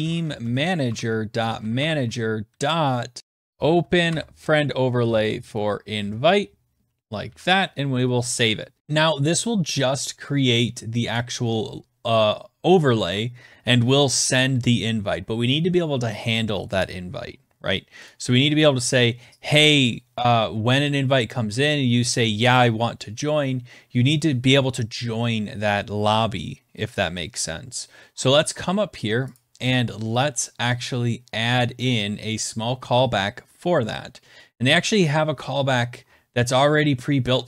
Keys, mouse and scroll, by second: 0.0-5.5 typing, 0.0-1.9 drag, 3.5 click, 3.5 scroll, 6.8 ctrl+s, 8.8 click, 8.8-10.5 scroll, 11.1 click, 18.0 click, 28.1-28.5 scroll, 29.3 click, 34.5-37.2 scroll, 37.2 scroll.